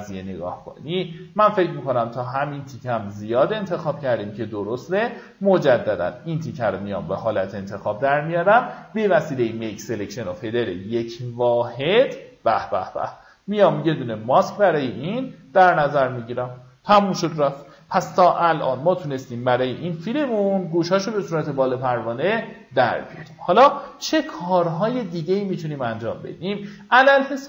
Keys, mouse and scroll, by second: 1.4 alt+scroll down 1, 2.3 alt+scroll down 1, 3.3 click, 6.4 alt+scroll up 1, 7.0 right click, 8.2 click, 15.3 alt+scroll up 1, 16.0-16.9 alt+scroll down 1, 17.4 alt+scroll down 1, 18.1-18.5 alt+scroll up 1, 23.1-23.9 alt+scroll up 1, 24.5-25.6 drag.